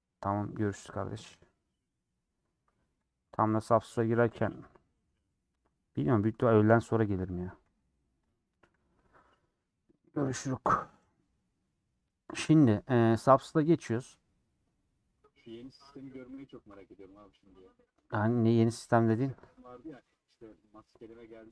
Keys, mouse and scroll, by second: 3.3 scroll down 2.